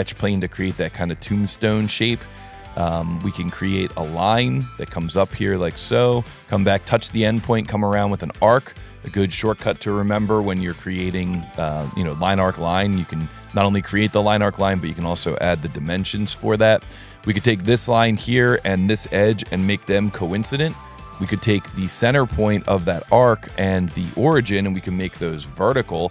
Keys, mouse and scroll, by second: 0.0 right click, 0.3 s, 1.2 click, 1.7-2.2 middle drag, 2.4 scroll down 3, 2.8 s, 3.5 click, 4.4 click, 5.5 click, 8.0 click, 13.3 click, 14.3 click, 15.1 click, 17.1 click, 21.6 click, 22.8 click, 23.7 click, 24.8 v, 25.8 s.